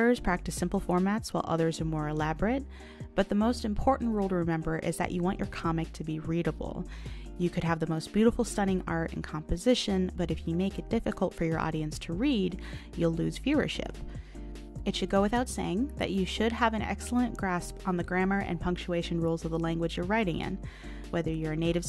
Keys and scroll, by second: 1.7 ctrl+z, 3.7 ctrl+z, 7.8 ctrl+z, 9.4 ctrl+z, 15.9 ctrl+z, 18.9 ctrl+z.